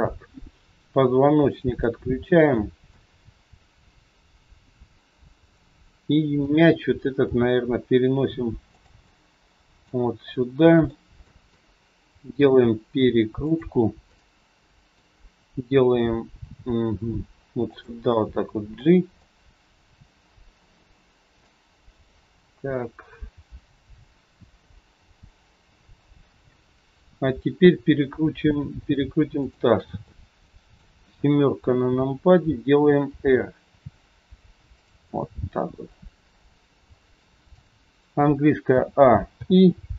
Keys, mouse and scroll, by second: 1.4 shift+click, 2.8 scroll up 1, 2.9 middle click, 9.0 middle click, 11.0 scroll up 1, 11.2 middle click, 12.6 r, 14.0 middle click, 16.9 g, 18.0 middle click, 19.2 middle click, 19.2 scroll up 1, 21.5-22.2 scroll down 3, 22.0 middle click, 29.4 shift+click, 29.9 middle click, 31.8 KP_7, 33.0 r, 35.0 middle click, 38.7 a, 39.3 i.